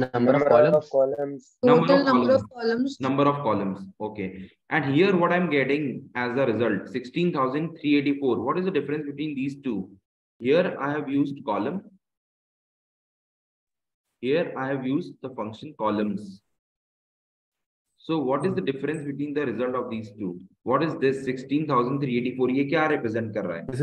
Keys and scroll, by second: 4.7 Right.